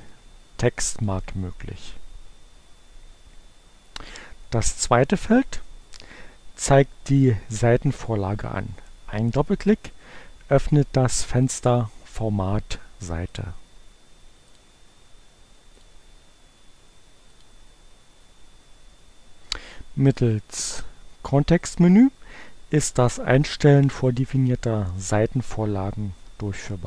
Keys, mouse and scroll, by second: 0.8 click, 10.1-12.1 drag, 12.8-13.8 drag, 14.4 click, 15.6 click, 17.4 click, 20.3-21.8 right drag.